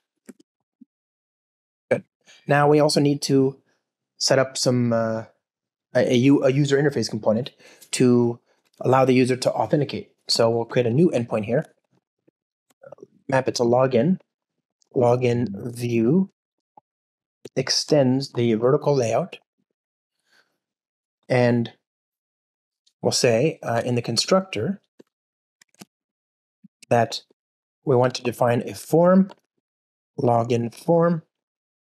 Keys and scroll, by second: 0.5 alt+shift+Right, 1.2 alt+shift+Left, 1.6 alt+super+l, 11.5 Return, 23.6 super+n, 26.2 alt+shift+Right, 26.6 alt+super+l, 31.3 Return.